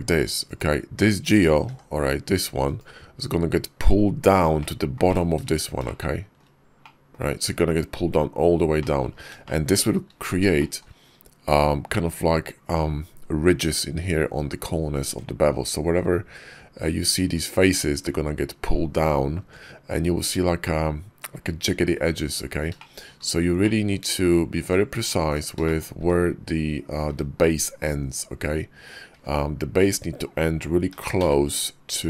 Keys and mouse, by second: 1.5 g, 4.4 click, 4.9 click, 5.7 shift+click, 6.7 click, 8.6 click, 9.3 shift+middle click, 10.4 shift+click, 14.9 Tab, 19.2 Tab, 22.6 shift+click, 23.4 middle click, 24.5 click, 24.7 Tab, 25.1 click, 25.5 shift+click, 25.8 `, 26.9 `, 27.4 KP_5, 28.9 `, 30.8 g.